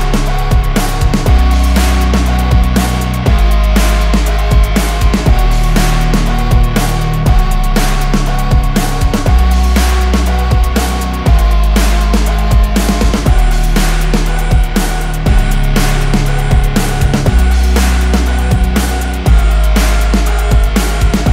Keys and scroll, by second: 1.4 F5, 9.3 space, 9.5 Escape, 12.2 F10, 12.9 F2, 16.7 Delete, 19.0 Escape.